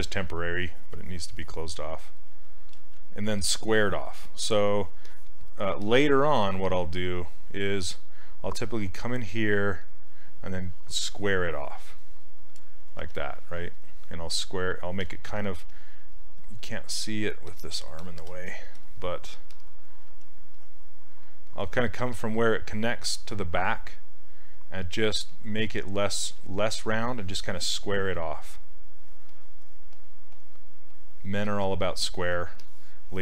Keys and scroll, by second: 2.8 ctrl+z, 6.4 s, 20.1 s.